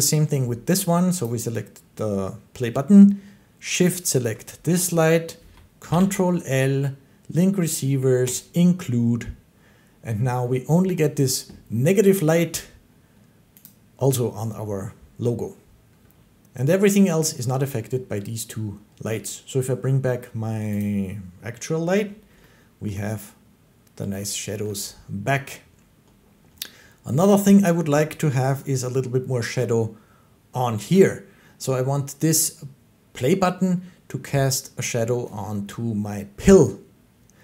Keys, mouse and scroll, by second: 1.1 click, 3.7 shift+click, 5.8 ctrl+i, 8.2 click, 10.2-13.2 drag, 13.5-18.5 drag, 20.7-22.5 drag, 22.5 shift+click, 22.7 shift+middle click, 24.5 shift+middle click.